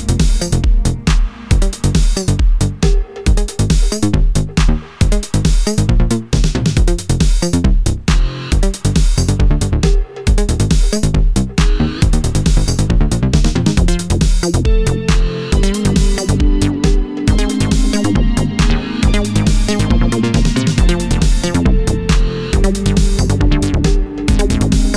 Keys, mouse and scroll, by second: 0.0-15.4 drag, 15.4 Delete, 17.3-18.0 scroll up 1, 18.0 scroll up 1, 18.1-18.8 scroll down 1, 18.8-19.8 drag, 19.8 middle click, 19.8-20.3 scroll up 1, 20.3-20.7 scroll down 1, 20.5 middle click, 20.7 Down, 21.0 Up, 21.9-23.1 drag, 23.1 ctrl+z, 24.6 click.